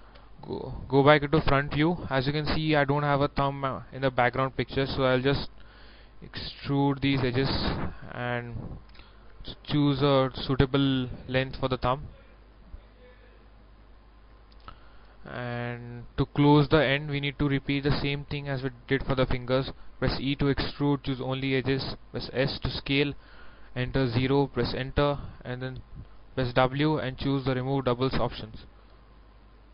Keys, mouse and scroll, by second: 0.3 KP_1, 2.4 scroll down 1, 3.8-4.1 scroll up 1, 4.5 shift+middle click, 7.2 e, 7.7 click, 9.1 z, 11.7 click, 14.5-16.7 middle drag, 20.3 e, 21.2 click, 21.7 click, 22.4 s, 24.1 0, 24.8 Return, 26.5 w, 27.4 click.